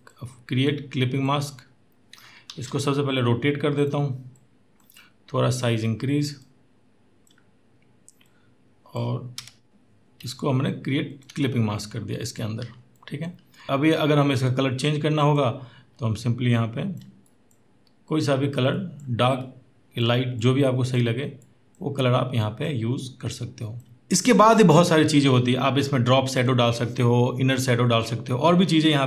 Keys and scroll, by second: 2.3 ctrl+t, 9.3 Return, 24.0 Down, 24.0 Up.